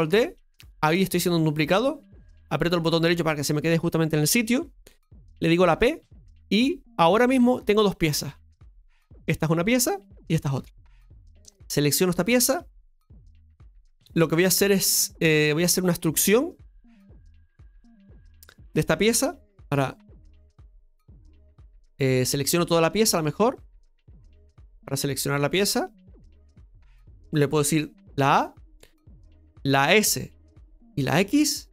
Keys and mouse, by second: 6.3 p, 8.4 Tab, 9.0 right click, 10.1 right click, 11.3 right click, 13.9 KP_Divide, 15.2 middle click, 16.1-17.4 middle drag, 17.5 Tab, 19.4 KP_Divide, 20.9-22.3 right drag, 22.4 alt+shift+right click, 22.6 alt+shift+right click, 22.8 alt+shift+right click, 23.1 right click, 23.5 right click, 24.8 click, 27.9 a.